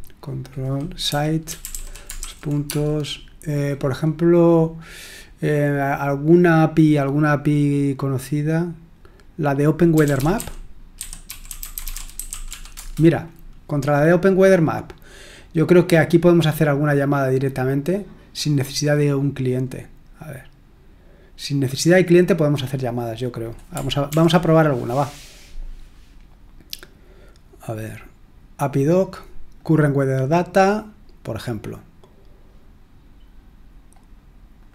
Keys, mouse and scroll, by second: 0.2 click, 0.8-2.7 typing, 9.7-12.9 typing, 15.3 click, 19.4-20.4 drag, 21.6-22.8 drag, 23.4 click, 24.1 ctrl+l, 25.9-26.6 scroll down 1, 27.1-28.0 scroll up 1, 29.5-30.7 drag, 32.9-33.4 scroll down 2, 33.4-33.7 scroll down 1, 34.6 click.